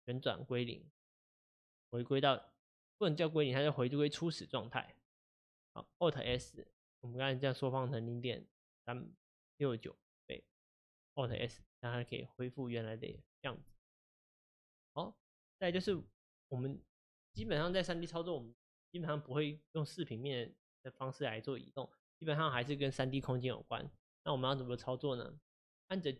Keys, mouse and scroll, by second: 5.5 click, 6.2 click, 11.4 alt+s, 13.4 click, 14.0-26.1 shift+middle drag.